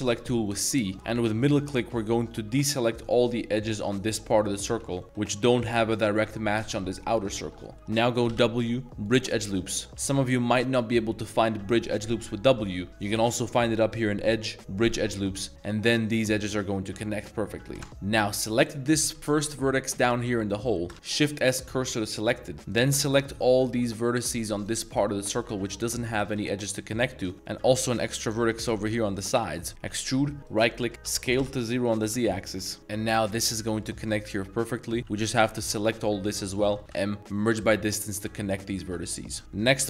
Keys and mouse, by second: 0.9 ctrl+z, 1.1 c, 3.9 drag, 4.4 middle drag, 4.8 z, 5.0 middle click, 5.0 z, 7.1 middle drag, 7.5 z, 7.7 middle click, 8.3 w, 9.5 middle drag, 9.9 w, 10.6 w, 14.1-14.9 drag, 15.5 middle drag, 17.8 middle drag, 17.9 1, 18.4 click, 18.7 middle click, 19.2 z, 19.6 z, 20.5 middle click, 21.7 shift+s, 22.0 middle click, 22.5 shift+z, 22.7 shift+click, 23.1 shift+click, 23.6 shift+click, 23.9 shift+click, 24.2 shift+click, 24.6 shift+click, 24.9 shift+click, 25.4 shift+click, 25.7 shift+click, 26.7 middle drag, 27.3 c, 27.4 middle click, 27.9 shift+click, 28.2 shift+click, 28.6 shift+click, 28.7 z, 29.1 middle click, 29.9 e, 30.8 middle click, 31.1-33.2 typing, 32.2 click, 32.8 middle click, 33.6 middle click, 34.0 shift+middle drag, 34.4 middle drag, 34.9 middle click, 35.4 shift+b, 35.5 shift+middle drag, 36.8 m, 38.2-38.8 drag, 38.8-39.4 middle drag, 39.4 z.